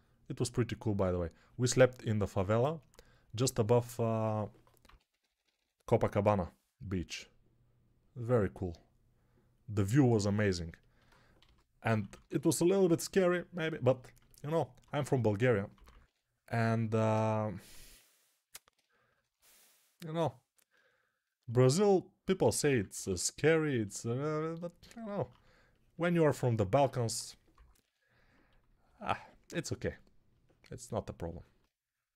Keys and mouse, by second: 4.7-5.4 typing, 11.3-12.2 typing, 14.8 1, 15.6 [, 15.8 [, 15.9 [, 22.6 p, 22.8 ], 22.9 ], 26.9 1, 27.4 [, 27.6 [, 28.7 [.